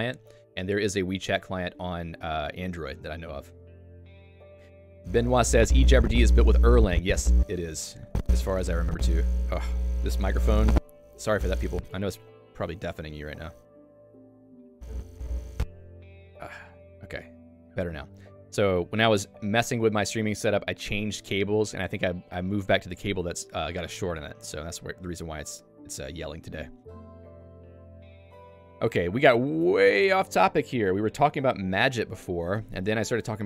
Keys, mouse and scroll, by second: 29.8 Escape, 29.9 Escape.